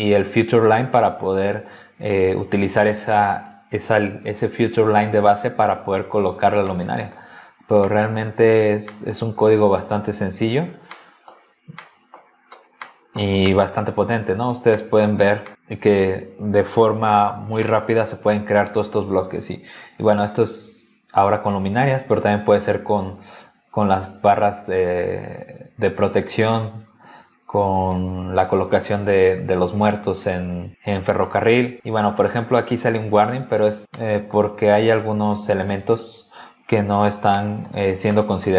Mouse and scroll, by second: 1.0 click, 2.4 click, 3.5 click, 6.5 scroll down 1, 6.6 middle click, 7.5 scroll down 1, 7.8 middle click, 8.4 scroll down 1, 8.9 middle click, 9.3 scroll up 1, 9.8 click, 10.6 scroll down 1, 10.9 middle click, 11.8 middle click, 12.4 scroll down 1, 12.8 middle click, 13.4 middle click, 14.2 scroll up 2, 14.7 middle click, 15.1-15.4 scroll down 3, 15.4 middle click, 17.6 middle click, 31.8 scroll down 2, 32.4-32.7 scroll up 2, 33.8 scroll down 2, 33.9 middle click, 37.3-37.7 scroll down 2, 38.0-38.4 scroll down 2.